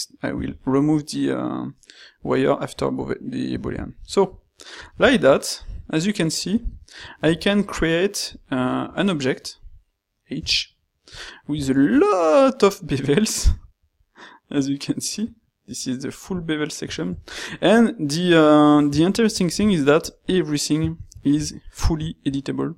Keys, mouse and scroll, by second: 5.7 a, 9.3 shift+middle click, 10.5 h, 10.9 middle click.